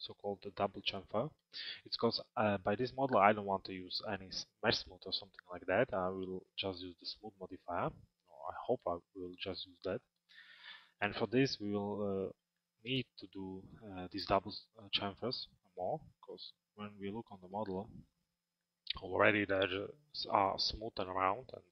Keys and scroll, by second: 16.0 alt+x.